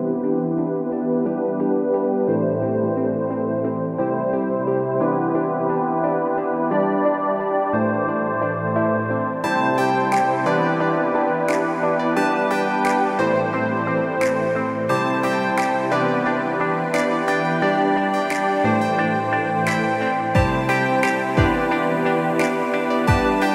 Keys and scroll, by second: 0.4 ctrl+=, 1.0 ctrl+-, 1.4 ctrl+=, 1.6 ctrl+=, 2.2 ctrl+-, 2.4 ctrl+-, 4.1 ctrl+=, 4.6 ctrl+-.